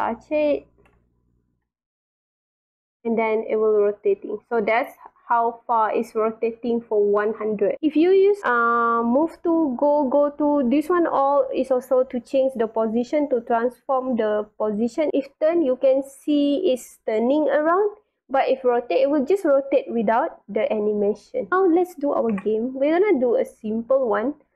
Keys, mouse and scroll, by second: 0.5 space, 0.9-5.5 drag, 1.5 w, 6.2-6.6 scroll up 2, 6.9-7.5 drag, 21.1 click, 23.5-24.5 drag.